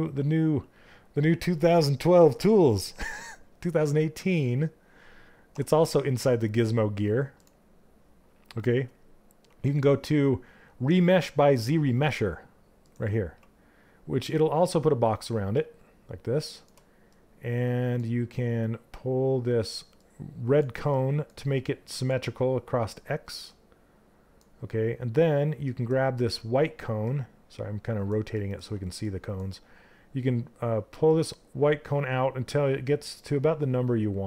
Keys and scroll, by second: 3.7 2.